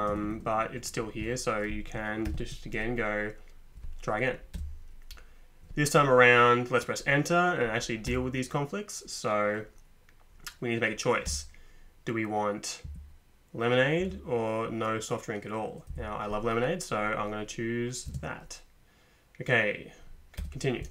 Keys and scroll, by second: 0.1 Tab, 0.2 Tab, 2.3 ctrl+p, 4.5 Return, 8.1 Return, 11.3 Return, 12.8 Down, 14.0 Up, 15.9 Down, 18.1 space, 20.4 Return.